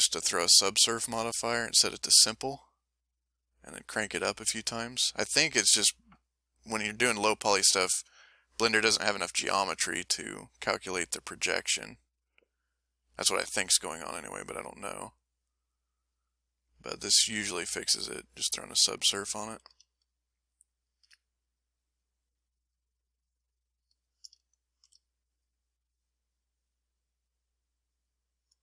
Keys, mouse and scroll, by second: 1.4 click, 2.5 click, 10.1 f, 10.9 click, 11.6 click, 12.5 click, 13.2 click, 13.9 click, 14.6 click, 15.2 click, 15.8 click, 16.5 click, 17.9 click, 19.5 a, 20.0 shift+click, 20.4 shift+click, 21.6 shift+click, 22.3 shift+click, 23.1 shift+click, 23.8 shift+click, 24.4 shift+click, 25.2 shift+click, 25.8 shift+click, 26.5 shift+middle click, 27.2 shift+middle click, 27.8 shift+middle click.